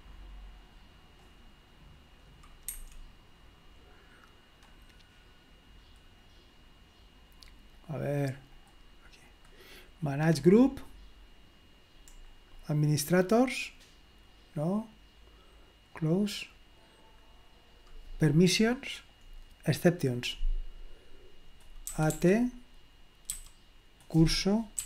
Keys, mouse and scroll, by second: 0.0 click, 1.2 click, 2.8 Escape, 6.2 click, 7.7 click, 8.6 click, 9.3 click, 10.4 click, 12.2-13.9 scroll down 2, 16.0 click, 18.3 click, 19.2-19.8 scroll down 2, 20.0 click, 21.9 typing, 23.3 typing, 24.6-24.8 typing.